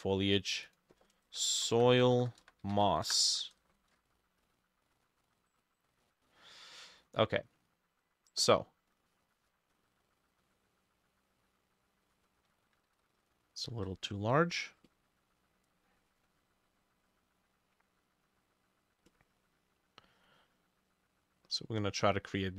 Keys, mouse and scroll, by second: 1.1-3.4 typing, 5.0 scroll down 1, 5.6 scroll up 1, 6.1 middle click, 10.4 double click, 12.9 ctrl+z, 13.5 shift+click, 14.1 double click.